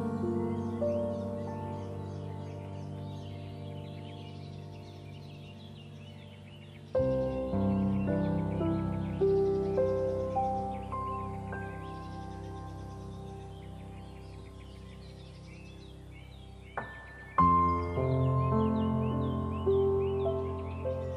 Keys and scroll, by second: 3.2 ctrl+z, 12.8 ctrl+0, 19.7 ctrl+z.